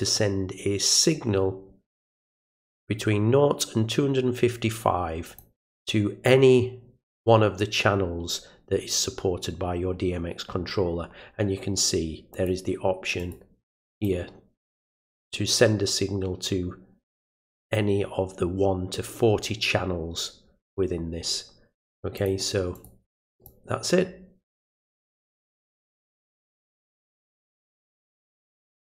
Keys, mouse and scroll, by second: 2.7-5.4 drag, 12.3 click, 13.2 click, 13.9 click, 17.2 click, 22.2 click, 22.7 click, 23.3 click, 24.7 click, 25.7 click, 28.8 click.